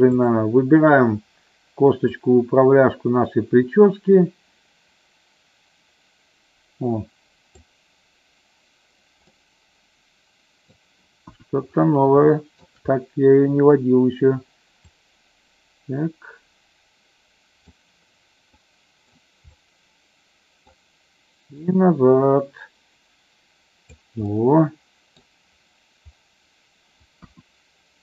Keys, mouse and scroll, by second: 0.2 click, 2.1-7.6 drag, 9.2-10.8 middle drag, 11.2 KP_1, 12.3 middle click, 14.9-17.6 drag, 18.5 middle click, 19.6-20.7 middle drag, 21.7-24.0 drag, 24.2-25.4 middle drag, 27.2 KP_1.